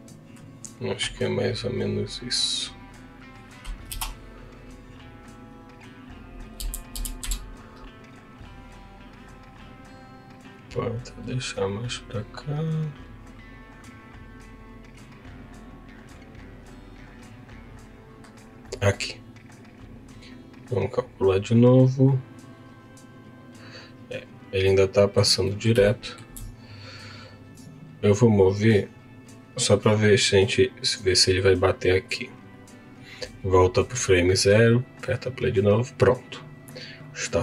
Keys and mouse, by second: 10.3 click, 20.3 click, 20.9 click, 23.6 click, 24.6 middle click, 25.4 middle click, 25.9 shift+middle click, 27.0-28.1 drag, 31.9 click, 32.6-34.2 drag, 37.0 click.